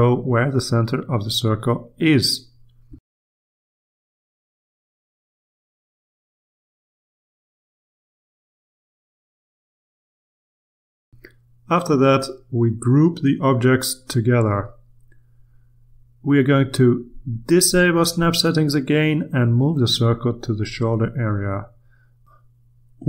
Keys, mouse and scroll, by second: 0.9 click, 1.8 click, 3.0 click, 3.9 click, 5.1 click, 6.4 Return, 7.1 click, 8.0 click, 8.6 Return, 9.2 click, 10.3 click, 11.0 Return, 12.0-13.6 drag, 14.6 ctrl+g, 18.2 click, 20.3-22.7 drag, 22.9-23.0 shift+drag.